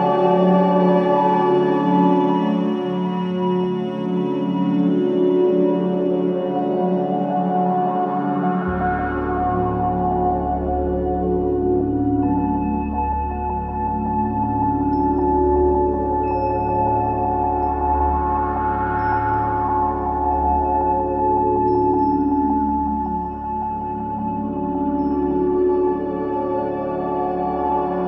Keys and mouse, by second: 0.3 Right, 0.6 Right, 0.8 Right, 1.1 Right, 1.6 Right, 4.0 i, 5.0 click, 9.7-11.0 right drag, 11.0 click, 11.8 click, 15.0 alt+click, 16.6 click, 18.0-19.2 drag, 19.5-20.5 drag, 21.6 click, 23.9 typing, 24.6 click, 25.9 click, 27.7 g.